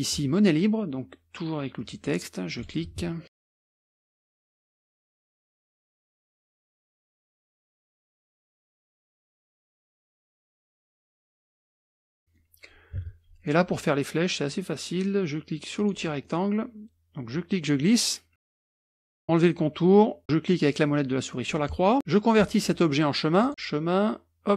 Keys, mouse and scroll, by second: 1.8 click, 2.6 click, 3.1-4.4 typing, 4.1 click, 4.3 click, 4.9-5.6 scroll up 1, 5.6 ctrl+z, 5.6 ctrl+scroll up 1, 5.6 click, 5.8 F1, 6.0 click, 6.2 scroll up 1, 6.3-8.3 typing, 7.2 middle click, 7.4 middle click, 7.6 middle click, 8.0 ctrl+scroll down 2, 8.2 click, 8.5 ctrl+click, 9.3 scroll up 2, 9.5 ctrl+click, 10.1 ctrl+click, 10.4 ctrl+click, 10.7 t, 10.8 click, 11.0 click, 11.2 KP_5, 11.4 click, 11.5 KP_Enter, 11.7 F1, 11.8 ctrl+click, 12.1 KP_Subtract, 12.2 middle click, 12.2-13.0 scroll down 2, 13.1 KP_Subtract, 15.8 click, 16.3-17.3 middle drag, 17.3-18.3 drag, 20.2 click, 21.3-22.2 scroll up 1, 23.8 click.